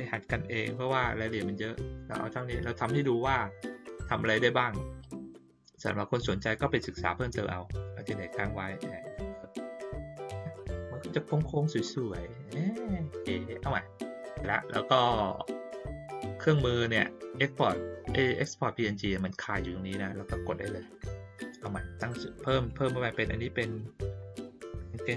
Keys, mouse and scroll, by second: 3.9 click, 5.1-9.6 drag, 13.0 click, 21.6 click, 22.6 click.